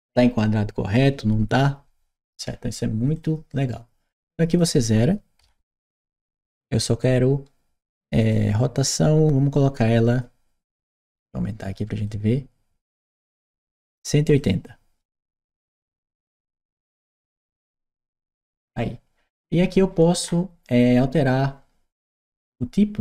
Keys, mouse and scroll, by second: 2.9 click, 4.3 click, 5.8 Return, 8.0 click, 11.9-13.2 drag, 14.2 click, 15.4 1, 15.8 8, 16.6 0, 17.1 Return, 20.1-20.4 middle drag.